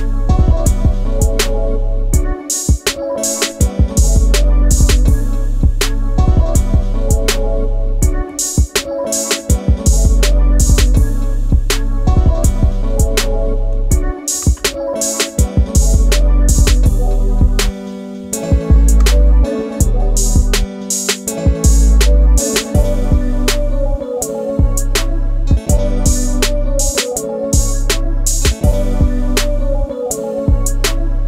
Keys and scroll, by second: 13.2 shift+space, 17.5-18.5 space.